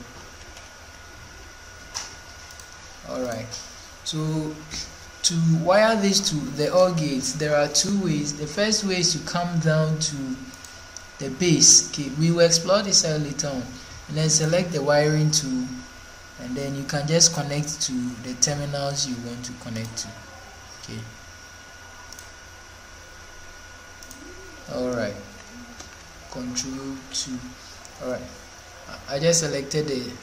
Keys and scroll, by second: 0.3 ctrl+4, 26.9 ctrl+2.